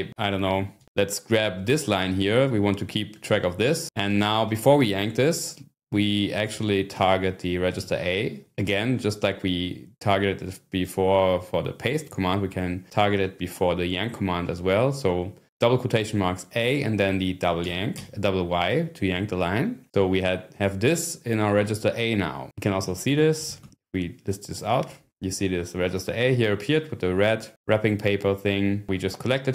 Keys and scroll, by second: 0.3 5, 0.8-1.1 scroll down 1, 6.9 ", 7.8 a, 17.6 y, 22.6-23.9 typing.